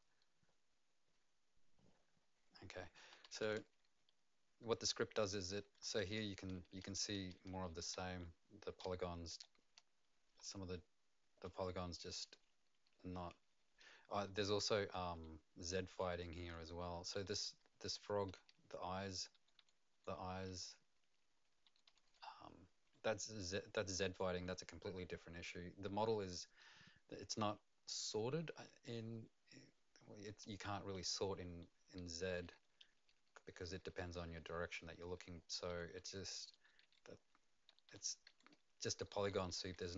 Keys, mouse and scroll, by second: 3.7-5.3 ], 6.8-22.8 typing, 32.0-39.9 typing.